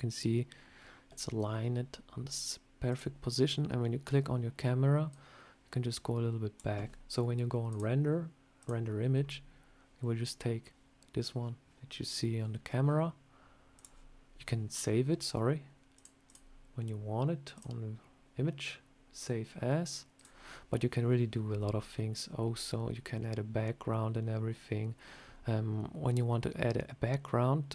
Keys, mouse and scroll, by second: 2.8 click, 5.0 click, 7.6 click, 15.8 click, 21.8 scroll up 2, 22.8 scroll down 1, 24.0 scroll up 1.